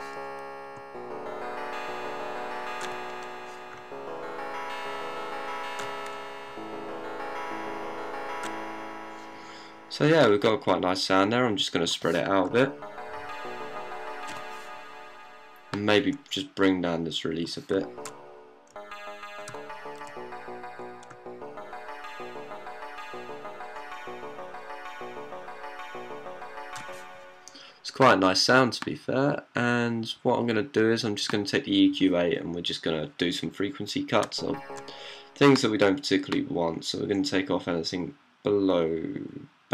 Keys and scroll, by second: 0.0-6.3 typing, 7.4-8.3 typing, 9.5 typing, 12.3-14.9 typing, 17.6-27.1 typing, 34.1 d, 34.6 d.